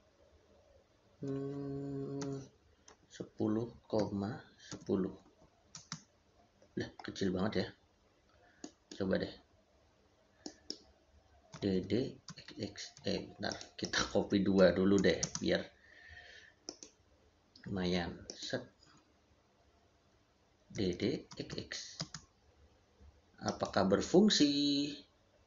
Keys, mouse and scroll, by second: 2.1 1, 5.6 space, 8.4 middle click, 11.4 d, 12.8 Escape, 13.3 click, 14.4 c, 15.1 space, 16.5 click, 18.7 Escape, 20.6 d, 21.9 space, 23.3 click.